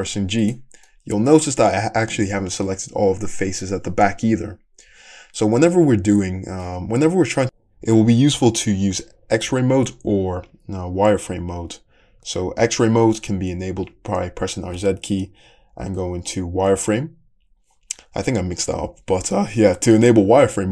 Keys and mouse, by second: 0.9-19.6 middle drag, 4.9 `, 14.8 z, 20.0 z.